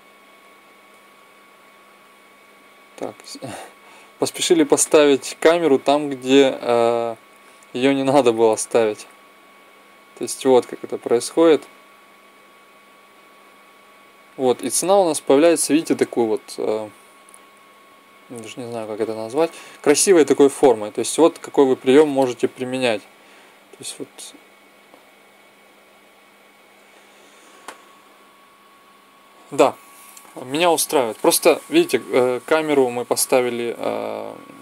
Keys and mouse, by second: 0.3-1.5 drag, 2.0 click, 3.3-4.6 drag, 8.1-9.9 drag, 10.7-12.4 drag, 22.3 Right, 26.1 Right, 27.4 Right, 27.9 Right.